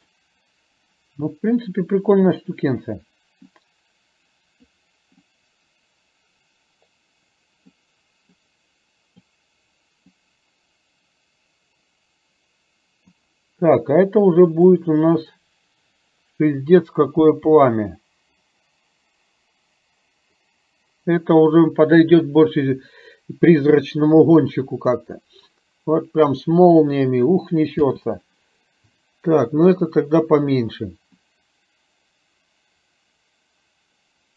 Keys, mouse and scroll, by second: 3.6-4.8 drag, 5.3-7.8 drag, 8.3-9.3 drag, 10.3-13.7 drag, 15.1 click, 17.9 space, 28.6 space, 31.4-34.3 drag.